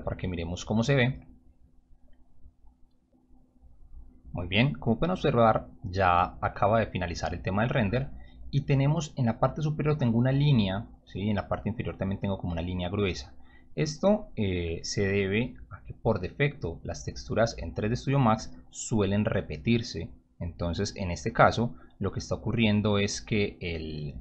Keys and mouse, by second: 1.7 click, 6.1 click, 7.1 click, 17.2 click.